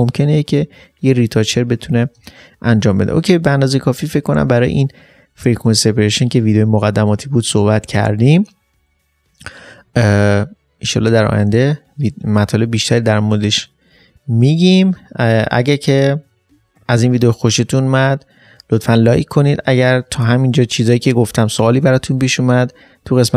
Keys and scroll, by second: 2.2 ctrl+space.